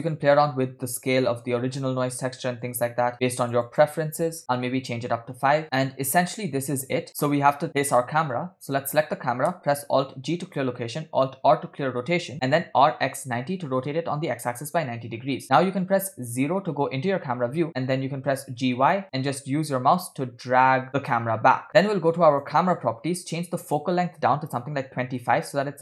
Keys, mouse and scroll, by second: 0.4 scroll up 3, 0.7 scroll down 1, 0.7 scroll up 1, 1.3-1.8 scroll down 2, 2.0 click, 2.7-4.7 drag, 5.5 space, 6.2 space, 6.7 scroll up 1, 7.1 scroll down 2, 7.2 scroll down 1, 8.8 click, 10.7 alt+g, 11.7 alt+r, 13.0 r, 16.6 KP_0, 18.2 g, 22.3 click, 23.7-25.3 drag.